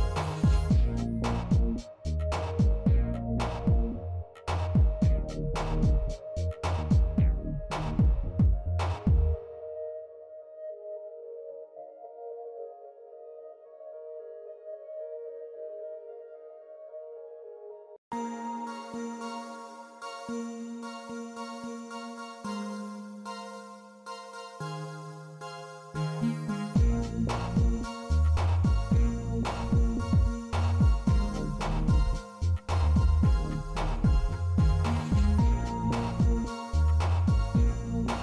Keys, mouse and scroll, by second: 3.6-4.2 shift+middle drag, 5.8-8.2 drag, 7.0 KP_0, 9.7-12.2 drag, 11.1 KP_0, 14.1-15.5 middle drag, 15.7 z, 19.5 middle drag, 20.5 middle click, 22.0 shift+d, 25.0-25.3 middle drag, 25.5 shift+middle click, 26.2 r, 29.7-30.4 middle drag, 30.4 shift+middle click, 31.5 click, 33.0 r, 35.6 middle click, 37.2 click.